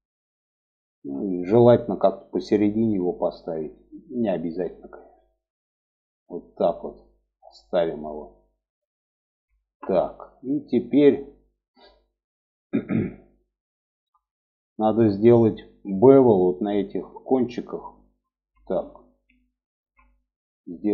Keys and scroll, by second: 0.3 g, 9.4 alt+z.